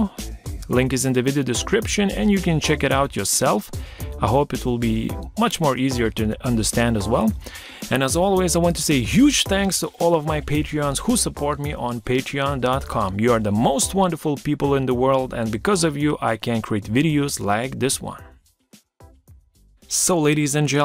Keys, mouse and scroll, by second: 0.2 BackSpace.